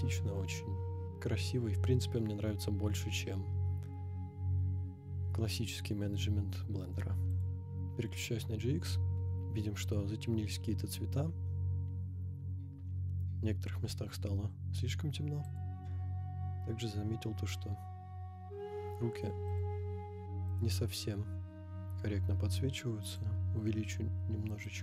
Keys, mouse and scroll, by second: 8.8-9.2 scroll up 5, 11.4-11.7 scroll down 2, 13.8 scroll down 1, 15.4 click, 16.1 scroll down 1, 19.5 click, 20.5 click, 21.7 scroll down 1, 23.0 click, 24.6-24.8 drag.